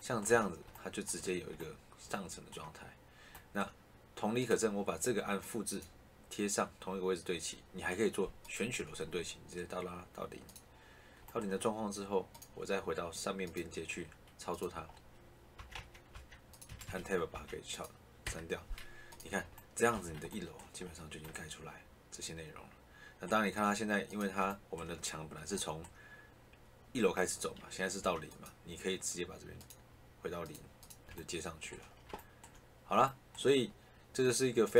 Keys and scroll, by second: 0.2 Escape, 15.5 Tab, 16.6 Escape, 19.8 Escape, 27.9 Tab.